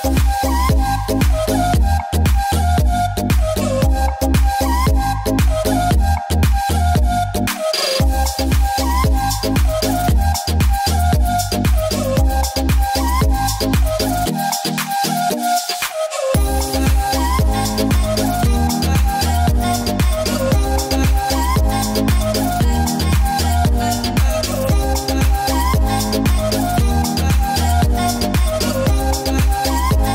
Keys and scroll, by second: 2.3 space, 4.8 space, 6.2 ctrl+s, 7.4 space, 8.0 space, 8.8 space, 10.1 space, 11.1 space, 24.1 space, 25.9 [, 28.8 space, 29.5 ctrl+z.